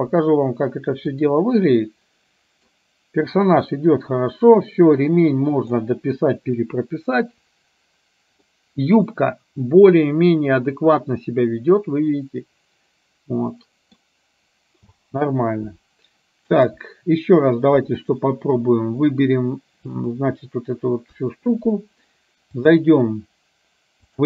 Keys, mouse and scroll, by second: 1.2 click, 2.0-2.7 middle drag, 3.7-5.9 middle drag, 8.6-14.1 middle drag, 15.0 space, 16.6 click, 18.0 click, 20.0 click, 21.2 KP_1, 22.6-24.2 drag.